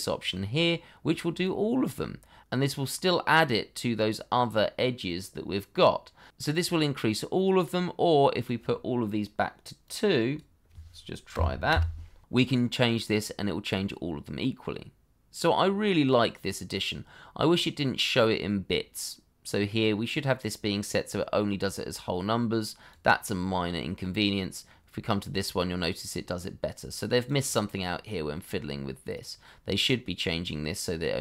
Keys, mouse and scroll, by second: 8.5-8.9 scroll up 1, 8.9 middle click, 11.3 2, 11.7 Return, 24.0 middle click.